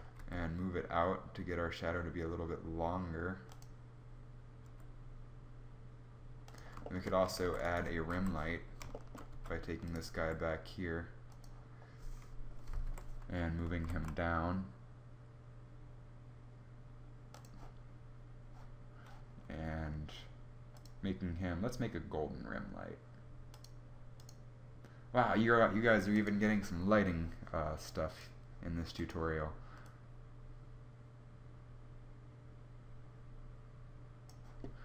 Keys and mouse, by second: 4.2 g, 6.9 shift+d, 7.7 KP_7, 8.9 g, 9.7 r, 12.4 KP_3, 13.4 g, 16.0 g.